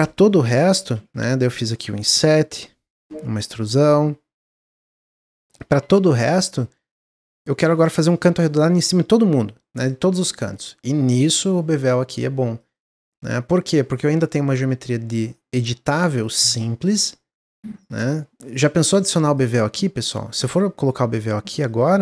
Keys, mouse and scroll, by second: 0.9 3, 1.1 click, 2.0 i, 3.1 e, 4.6 Tab, 4.9 scroll down 1, 5.2 middle click, 5.5 click, 5.7 Tab, 5.8 middle click, 6.0-6.4 scroll up 1, 9.8-11.1 middle drag, 11.1 click, 12.7-14.0 drag, 14.0 middle click, 14.4 Tab, 14.7 middle click, 15.0 Tab, 15.8 click, 16.2-18.8 middle drag, 18.8 2, 19.3 alt+click, 20.0 alt+shift+click, 21.7 alt+shift+click.